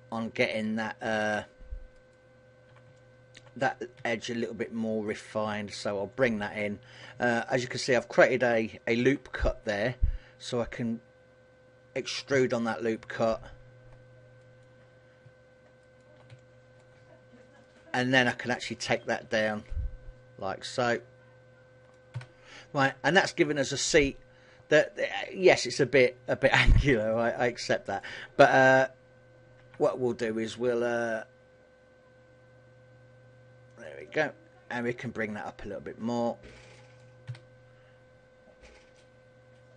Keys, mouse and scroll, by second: 0.2 middle click, 1.0 shift+middle click, 2.1 alt+shift+right click, 3.0 middle click, 4.1 s, 6.4 click, 6.7 middle click, 8.2 alt+right click, 9.2 KP_1, 10.8 click, 12.4 a, 12.8 middle click, 14.5 alt+right click, 16.0 alt+shift+right click, 16.5 shift+middle click, 17.8 alt+shift+right click, 19.3 click, 22.2 a, 22.7 scroll down 2, 23.0 middle click, 27.2 middle click, 29.6 ctrl+r, 34.4 click, 35.4 click, 37.4 a.